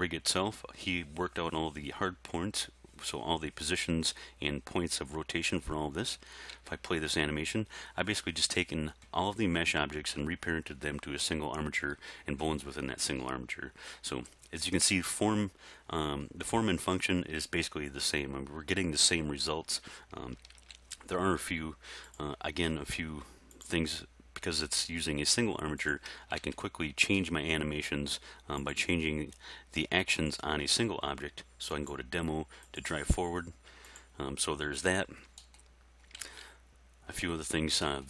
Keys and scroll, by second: 6.6 alt+a, 20.5 alt+a, 26.4 alt+a, 36.3 alt+a.